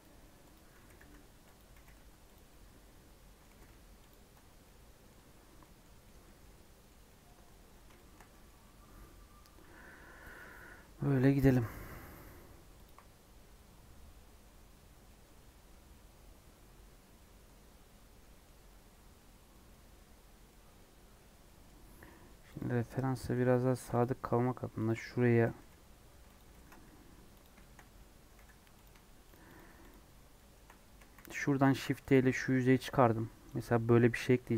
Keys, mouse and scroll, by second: 0.5 click, 0.8 g, 1.7 g, 2.4-3.5 middle drag, 3.5 g, 4.3 Tab, 4.5 scroll down 1, 4.6 middle click, 5.2-6.0 scroll down 5, 5.5 middle click, 6.0-7.3 middle drag, 7.3 scroll up 1, 7.9-13.2 shift+middle drag, 13.2-15.6 scroll down 2, 15.6-20.7 scroll down 1, 20.7-21.4 scroll down 1, 21.4 middle click, 21.6-22.0 scroll up 4, 22.0 middle click, 22.5 click, 22.9 Tab, 23.7 ctrl+r, 25.4 g, 26.4 ctrl+b, 27.5 shift+middle click, 27.8 scroll up 2, 28.4 3, 28.8 click, 29.2 shift+click, 29.5 shift+click, 29.8 shift+click, 30.2 shift+middle click, 30.6 scroll up 2, 31.1 shift+d, 33.5 p.